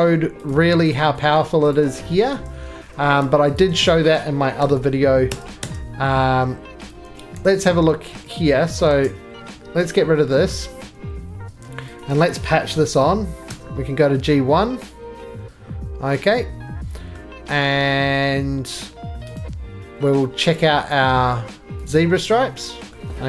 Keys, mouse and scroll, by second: 0.5 click, 0.9 shift+click, 1.7 click, 1.7-2.3 scroll, 2.4 x, 3.0 x, 3.6 click, 4.6 alt+f, 5.3 Tab, 5.6 Tab, 6.3 middle click, 6.4 middle click, 6.9 ctrl+middle click, 7.0 ctrl+z, 7.3 ctrl+z, 8.1 ctrl+z, 8.8 middle click, 9.6 x, 10.5 middle click, 10.6 middle click, 10.8 scroll, 11.0 2, 11.9 click, 12.7 alt+f, 13.5 Tab, 13.7-14.4 scroll down 3, 17.1 middle click, 19.3 right click.